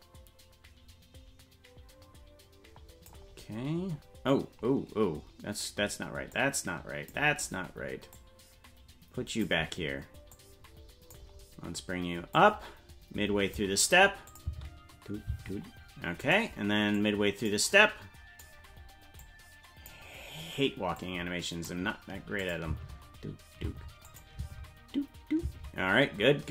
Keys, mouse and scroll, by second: 6.3 click, 8.1-9.5 drag, 10.3 click, 12.3-13.6 drag, 14.3 click, 14.4 space, 15.4 space, 16.4 right click, 16.9 click, 17.7 click, 19.2 click, 20.9 click, 22.4 click, 22.7 space, 24.0 click, 24.0 space, 24.4 space, 26.1 space.